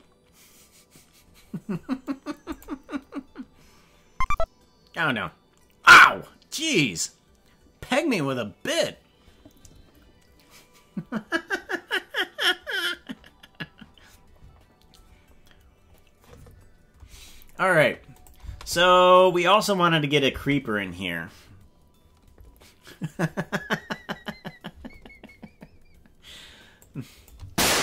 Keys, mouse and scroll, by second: 2.6 click, 18.2 click, 18.4 space, 20.4 space, 26.9 click, 27.4 space.